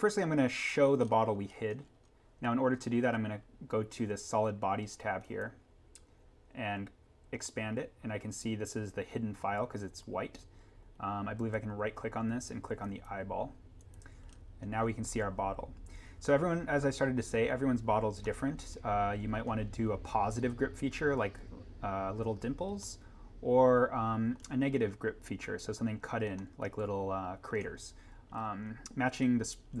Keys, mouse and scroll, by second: 1.0-1.9 scroll up 1, 3.7 scroll down 1, 5.2 click, 11.4 right click, 12.8 click, 14.3 scroll up 1, 18.2 middle click, 19.2 scroll, 22.7 scroll up 1, 23.0 middle click, 23.8 scroll, 24.7-26.3 scroll down 1, 26.3 scroll up 1, 26.4 middle click, 26.5-27.0 scroll.